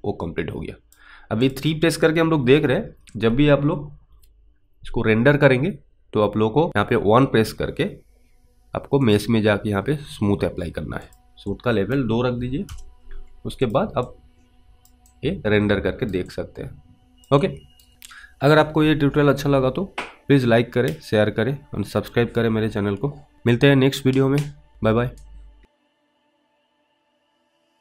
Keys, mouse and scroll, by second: 1.5 click, 9.1 click, 11.8 click, 12.7 Return, 13.7 click, 14.4 alt+click, 15.4 alt+right click, 16.6 alt+click, 17.0 alt+right click, 17.7 alt+right click.